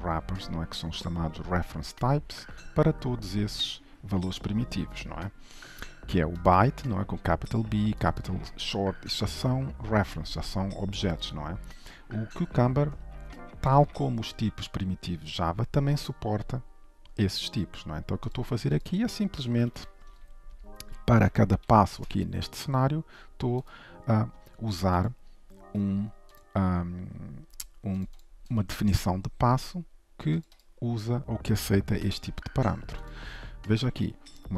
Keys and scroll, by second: 25.2 ctrl+b.